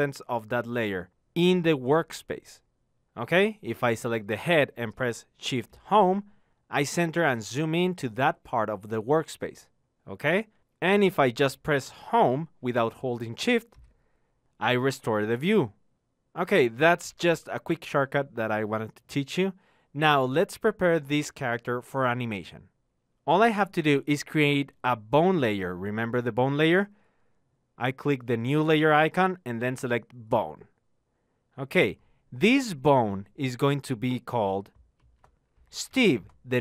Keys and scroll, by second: 5.3 shift+Home, 13.6 Home.